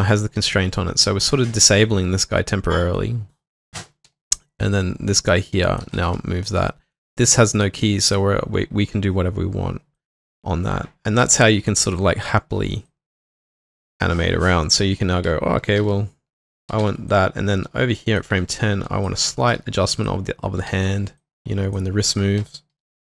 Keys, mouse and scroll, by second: 4.1 typing, 6.0 typing, 16.4-17.3 typing, 19.3-20.7 typing, 22.5-23.1 typing.